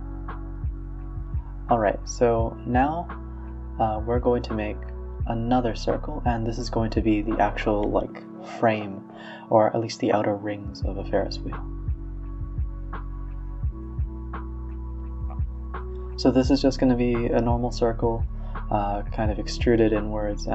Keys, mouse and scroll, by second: 1.9 drag, 2.1 click, 2.5 r, 3.6 x, 3.8 shift+a, 4.8 click, 5.8 r, 7.2 s, 8.4 middle click, 9.1 g, 10.2 Tab, 10.7-11.0 middle drag, 11.0 g, 12.0 middle click, 12.6 s, 14.0-15.2 middle drag, 15.2 KP_3, 15.8 s, 16.3 e, 16.4 s, 17.7-20.0 middle drag, 20.0 click, 20.2 click.